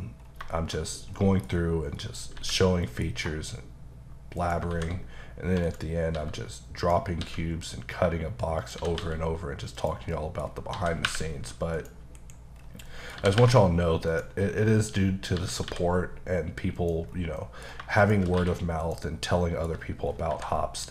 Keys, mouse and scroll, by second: 0.2 scroll down 2, 0.5 shift+middle click, 0.8 middle click, 0.9 scroll down 1, 1.2 middle click, 1.9 middle click, 2.3 h, 2.9 middle click, 3.2 scroll up 1, 4.4 shift+right click, 4.7 shift+a, 5.7 click, 6.1 s, 6.8 click, 7.2 s, 8.6 click, 8.8 typing, 10.1 middle click, 10.5-10.8 scroll up 2, 10.8 s, 11.7 click, 12.2 KP_Decimal, 12.6-12.9 scroll down 3, 12.9 middle click, 13.2 g, 14.1 click, 14.4 middle click, 15.4-15.7 typing, 16.8 click, 17.1 scroll down 2, 17.4 middle click, 18.0 click, 18.4 q, 18.9 click, 19.3 middle click, 19.7-20.9 scroll down 8, 20.3 h.